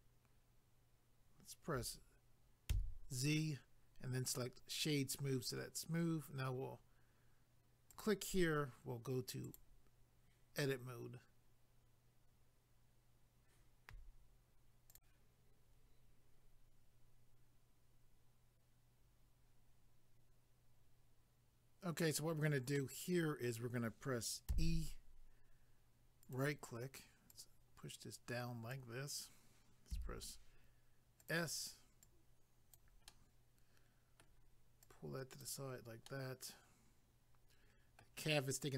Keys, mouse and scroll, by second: 4.3 click, 4.4 click, 7.9 click, 8.0 click, 9.5 click, 9.6 click, 14.9 click, 15.0 click, 22.7 middle click, 24.5 e, 26.2 right click, 26.3 right click, 27.3 click, 29.9 s, 31.2 click, 31.3 click, 32.0 click, 33.1 middle click, 34.8 click, 36.1 middle click.